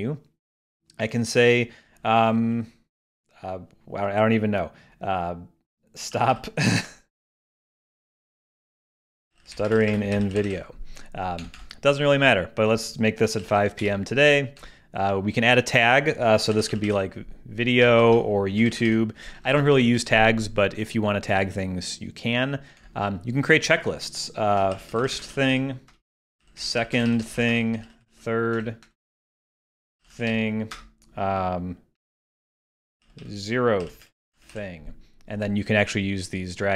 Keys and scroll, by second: 5.9-6.8 typing, 17.8 alt+shift+o, 18.0 alt+shift+Left, 18.6 alt+shift+y, 24.5-25.3 typing, 26.2 shift+Return, 27.5-28.3 typing, 32.3 shift+z, 32.9 shift+e.